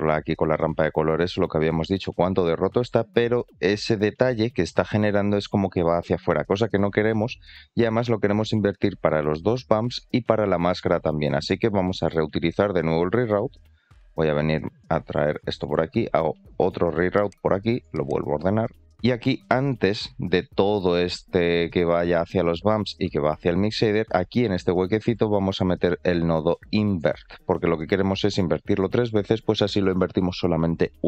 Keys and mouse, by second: 1.0-4.2 drag, 4.6-5.3 middle drag, 8.4 middle click, 11.0 middle click, 11.7 click, 17.5 click, 21.5 middle click.